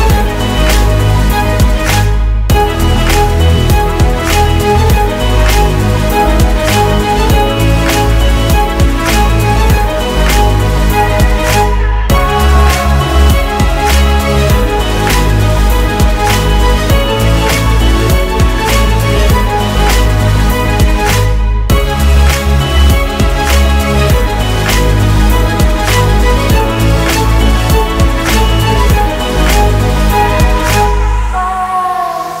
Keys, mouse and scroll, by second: 0.3-1.6 scroll up 1, 1.6 middle click, 18.3 double click, 21.7 space, 22.5 space, 23.4 space, 24.0 middle click, 24.3 double click, 25.4 double click, 31.3 typing.